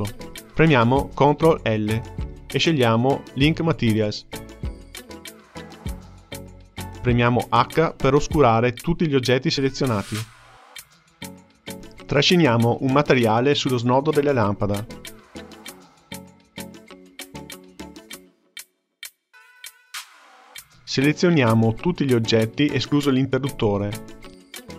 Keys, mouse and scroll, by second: 1.9 ctrl+l, 8.3 h, 9.9-10.9 shift+middle drag, 10.9 ctrl+scroll down 1, 11.0-13.3 shift+middle drag, 13.7-16.3 drag, 18.6-24.4 shift+middle drag, 24.4 drag.